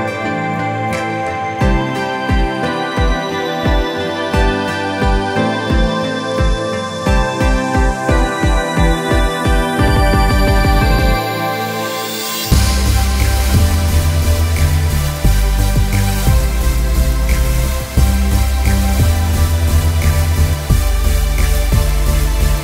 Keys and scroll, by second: 11.6 ctrl+-, 12.2 ctrl+-, 12.8 ctrl+=, 13.3-17.0 ctrl+=.